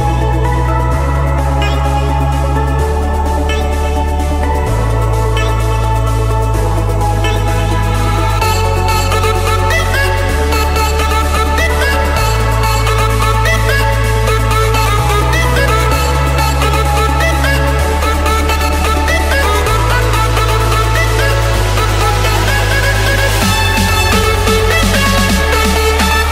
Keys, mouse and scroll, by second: 3.4-3.9 typing, 4.5 Return, 5.6-6.6 scroll, 6.6 scroll, 9.5 click, 11.0 click, 11.5 ctrl+1, 14.5-15.5 drag, 16.0-16.7 typing, 18.1 Return, 20.8-22.4 drag, 22.4 Escape, 23.7-24.8 drag, 25.8 click, 26.0 scroll, 26.1-26.3 scroll down 13.